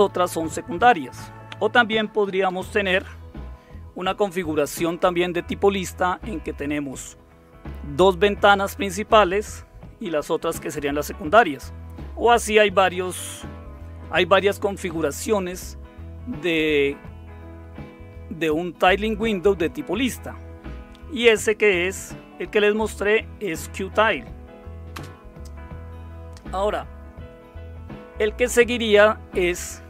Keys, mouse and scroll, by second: 2.4 Right, 24.9 space.